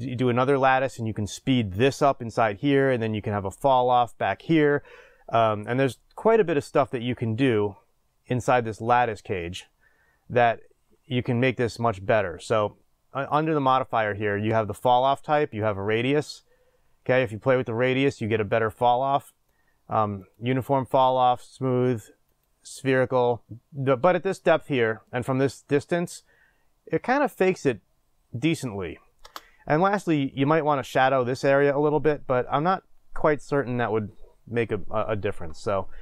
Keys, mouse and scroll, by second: 15.9-20.3 drag, 22.4-36.0 drag, 29.3 space.